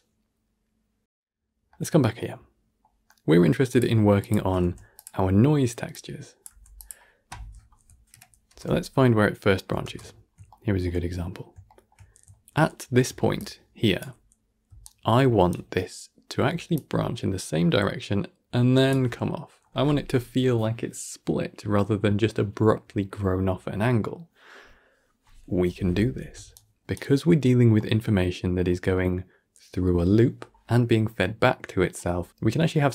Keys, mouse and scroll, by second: 1.0-3.6 middle drag, 3.6 click, 4.1 shift+click, 4.5 g, 5.1 middle click, 5.5-5.8 scroll up 2, 5.8 drag, 6.4 g, 8.0 shift+Left, 8.4 shift+space, 9.7 shift+space, 10.0-10.4 scroll up 1, 10.4-10.9 shift+middle drag, 10.9-11.6 scroll up 7, 11.6-11.9 shift+middle drag, 11.9-12.3 scroll up 1, 12.4-13.2 shift+middle drag, 13.2 d, 13.3 click, 13.9 d, 14.5 d, 14.7 right click, 15.4 d, 16.6-18.8 drag, 18.8 d, 18.8 d, 26.2 d, 26.4 right click, 26.8 d, 26.9 d, 27.3-27.7 scroll down 3, 27.7-28.4 middle drag, 28.4-28.8 scroll up 4, 28.8-31.9 middle drag.